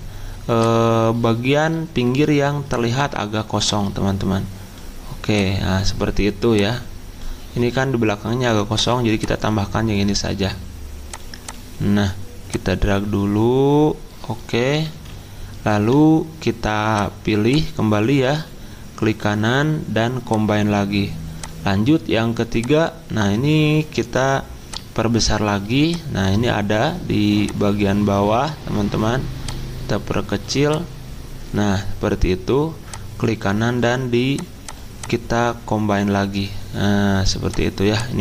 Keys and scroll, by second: 14.6 Down, 14.7 Down, 14.9 Down, 15.1 Right, 15.6 Right, 15.6 Right, 15.8 Down.